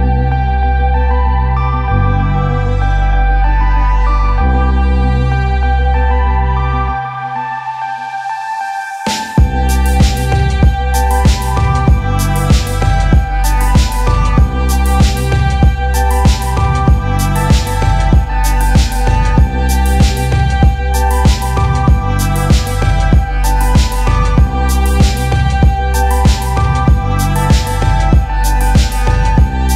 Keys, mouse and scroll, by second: 0.0-1.8 typing, 3.0 click, 3.0 scroll down 7, 4.1 click, 4.4 click, 4.8 scroll, 9.3 click, 9.6-10.6 typing, 10.0-11.4 drag, 12.6 click, 12.7 click, 13.1 click, 13.2 click, 13.7 click, 13.9 click, 14.4 click, 15.4 click, 15.7-16.7 typing, 18.6 click, 19.4 click, 20.0 click, 20.2 click, 20.4 click, 20.7 click, 21.5 click, 21.5-22.5 typing, 24.2 click, 25.3 click, 26.1 click, 27.4 click, 28.0 click, 28.7 click, 29.2 click.